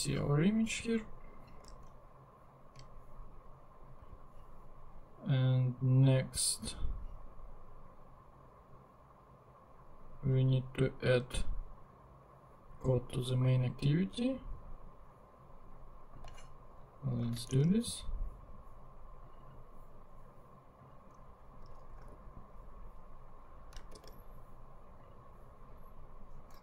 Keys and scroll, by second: 1.8 super+Tab, 17.2 super+c, 17.5 super+Tab, 21.6 Return, 22.0 super+v, 24.0 super+r.